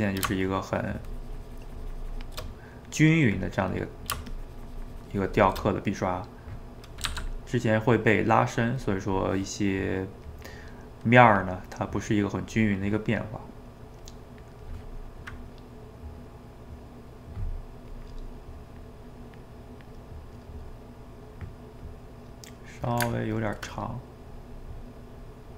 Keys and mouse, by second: 2.4 middle click, 3.4 click, 4.0 middle click, 4.3-5.7 shift+drag, 5.7-7.0 middle drag, 7.0 f, 7.5 middle click, 8.2-10.7 drag, 10.7 middle click, 11.3 click, 11.7 middle click, 12.6 click, 13.2 middle click, 14.0 click, 14.9-17.9 middle drag, 17.9-20.1 drag, 20.1-21.8 middle drag, 21.8-23.1 drag, 23.1-24.3 ctrl+middle drag, 24.3-25.5 drag.